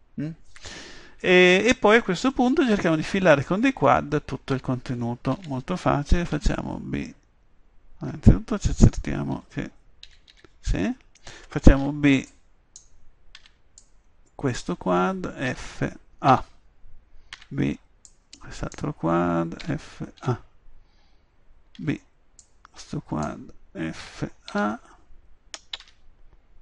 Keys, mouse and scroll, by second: 5.4 a, 6.3 b, 10.0 a, 10.3 a, 11.8 b, 12.3-13.8 drag, 13.4 b, 15.5 f, 16.3 a, 17.3 b, 19.6 f, 20.2 a, 21.8 b, 24.0 f, 24.5 s.